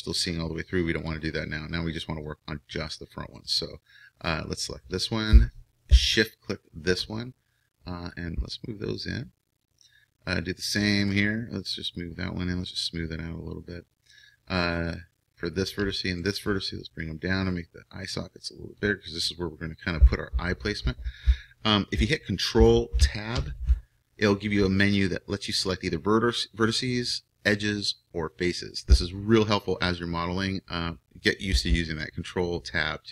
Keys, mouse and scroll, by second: 1.1-3.5 drag, 3.5-9.6 right drag, 8.1-11.1 drag, 11.1-13.9 right drag, 12.0-13.9 drag, 15.2-18.7 right drag, 17.0-18.7 drag, 23.4 ctrl+Tab.